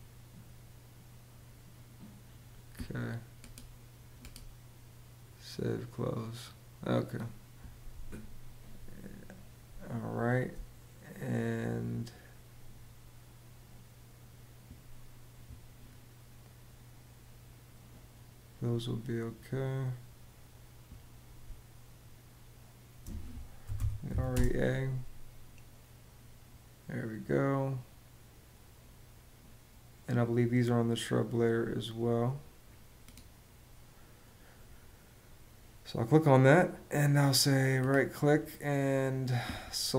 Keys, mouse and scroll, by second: 9.4 space, 21.1 space, 23.1-24.3 typing.